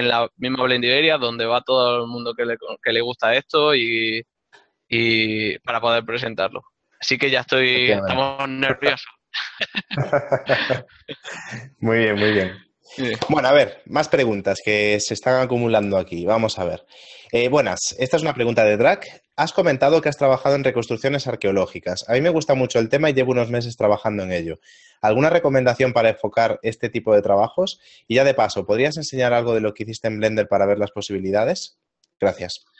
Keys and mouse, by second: 32.2 click.